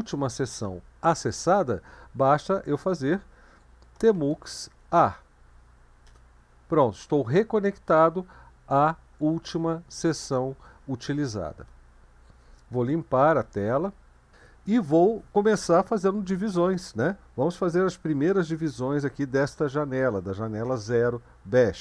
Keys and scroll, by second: 3.1-5.1 typing, 6.1 Return, 13.4 ctrl+l.